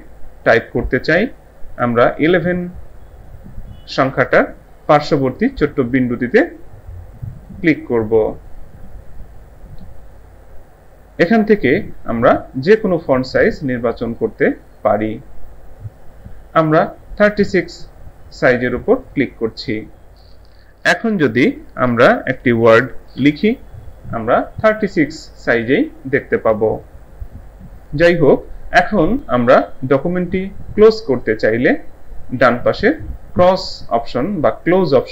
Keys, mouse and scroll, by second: 7.3 click, 19.1 click, 21.9-23.7 typing.